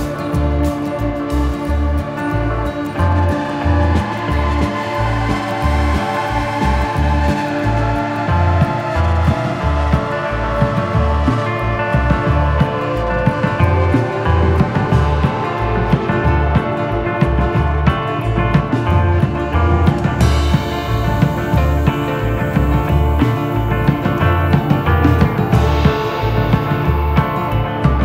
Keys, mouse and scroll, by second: 0.3 click, 0.4 click, 1.1 shift+middle click, 1.8 middle click, 2.7 middle click, 3.2 middle click, 3.7 x, 4.0 f, 4.2 shift+middle click, 4.4 scroll up 1, 4.6 f, 4.7 click, 5.4 click, 5.6 middle click, 6.0 middle click, 6.6 click, 7.4 click, 7.6 middle click, 7.7 click, 8.7 shift+middle click, 9.4 click, 9.8 scroll up 1, 10.0 click, 11.1 click, 11.8 click, 12.0 click, 12.3 shift+middle click, 12.4 middle click, 12.6 click, 12.9 middle click, 13.6 middle click, 14.5 click, 15.2 middle click, 15.4 shift+middle click, 15.6 click, 16.4 f, 16.6 click, 17.5 click, 17.6 middle click, 18.2 click, 19.5 middle click, 20.0 click, 20.2 shift+middle click, 20.4 click, 20.8 f, 20.9 click, 21.7 middle click, 22.0 click, 22.4 middle click, 22.6 click, 22.9 shift+middle click, 23.2 click, 23.9 middle click, 24.4 click, 24.8 shift+middle click, 26.4 z, 26.8 click.